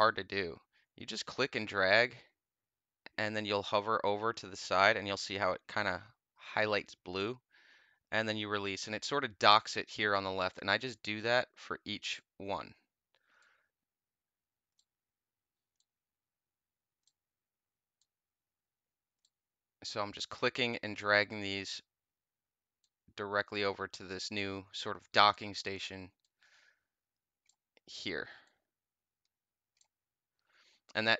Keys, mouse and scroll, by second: 3.0 click, 10.4-12.0 drag, 13.3-14.7 drag, 15.7-16.9 drag, 17.9-19.1 drag, 20.2-21.6 drag, 22.7-24.3 drag, 26.1-27.4 drag, 28.3-29.7 drag.